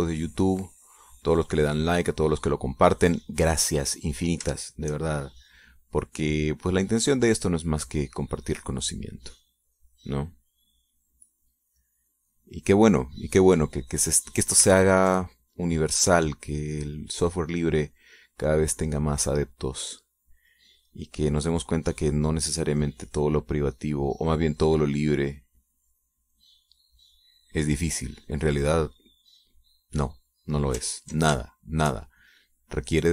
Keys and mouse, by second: 1.6 click, 2.9 click, 4.3 click, 5.5 shift+click, 5.9-14.7 shift+drag, 15.7 ctrl+click, 16.4-21.2 ctrl+drag, 21.3 middle click, 21.6 click, 22.4-23.7 drag, 22.4 middle click, 24.5-31.5 drag, 31.8 ctrl+click, 32.3 ctrl+shift+click, 32.9-33.1 shift+drag.